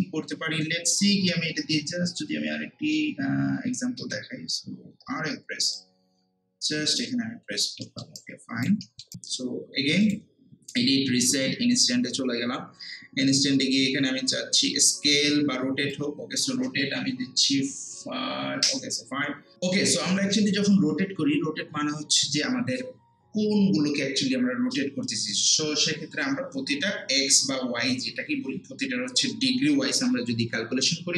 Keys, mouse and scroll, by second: 3.3 alt+middle click, 3.6-4.0 typing, 5.7-7.3 drag, 7.3 scroll down 1, 7.7 scroll up 1, 7.8 middle click, 8.2 alt+right click, 8.8 alt+middle click, 10.0 click, 15.9-18.6 drag, 18.6 5.